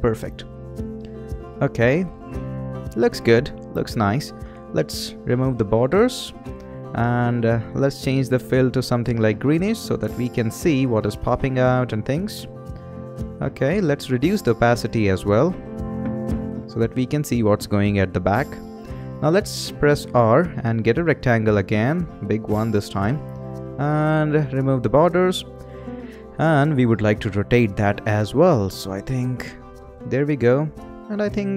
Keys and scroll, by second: 20.0 r.